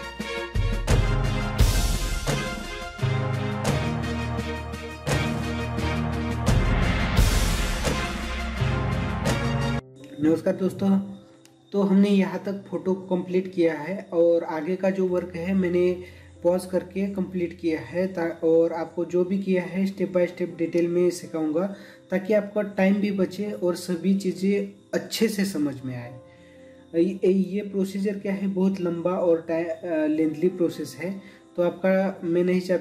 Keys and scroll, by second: 0.7 ctrl+=, 1.9 ctrl+=, 5.8 ctrl+-, 6.8 ctrl+=, 7.9 ctrl+-, 8.3 space, 8.5 ctrl+=, 8.7 ctrl+=.